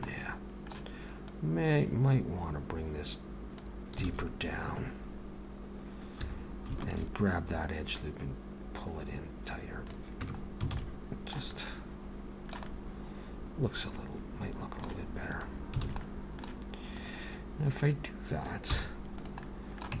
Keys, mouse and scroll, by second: 0.1 middle click, 1.3 click, 4.1 alt+a, 6.2 2, 6.8 alt+shift+click, 8.0 click, 10.3 Tab, 10.4-10.8 scroll down 4, 10.8 alt+a, 10.8 alt+middle click, 11.5 middle click, 12.6 middle click, 13.4 alt+middle click, 15.3 click, 15.9 alt+a, 16.0 middle click, 16.9 click, 18.7 h, 19.2 click, 19.4 middle click.